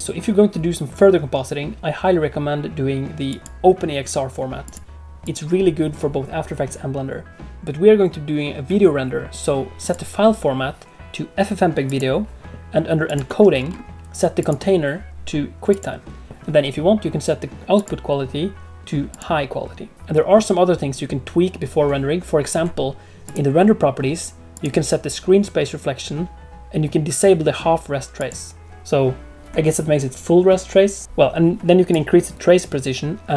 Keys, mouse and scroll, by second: 3.2 click, 4.6 click, 5.2 click, 9.8 click, 13.0 click, 13.5-14.3 scroll down 2, 14.3 click, 14.3-16.0 scroll down 3, 17.7 click, 23.2 click, 24.5 click, 28.1 click, 31.9 click.